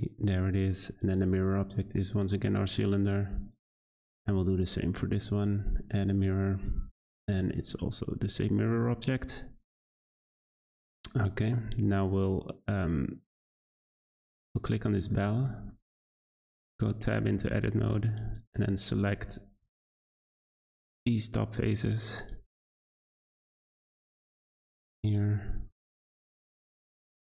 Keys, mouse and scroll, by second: 1.1 click, 3.4 click, 6.6-7.3 drag, 7.3-8.5 scroll down 5, 8.5 click, 9.8 click, 14.1 click, 14.7-15.3 middle drag, 15.3 Tab, 15.7 shift+middle click, 16.2-16.9 scroll up 3, 16.9 shift+middle click, 17.7-18.3 scroll up 1, 18.3 3, 19.6 z, 20.4-21.2 scroll up 1, 21.2 click, 23.9 click, 24.1 click, 24.5-24.9 scroll up 1, 24.9 2, 25.7 click, 25.8 click, 26.9 3.